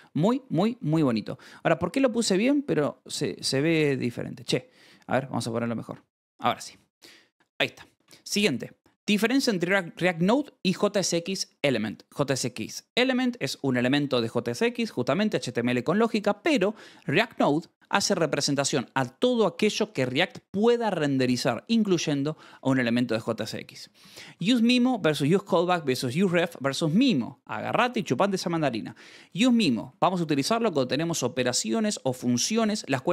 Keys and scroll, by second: 0.6 Escape, 1.4 a, 2.9 Escape, 3.4 k, 4.5-6.4 typing, 6.2 Escape, 6.6 ctrl+s, 7.7-8.8 typing, 9.2 Escape, 16.4 h, 17.0 e, 17.6 Escape, 23.3 j, 23.9 shift+v, 24.2 Escape, 28.2 h.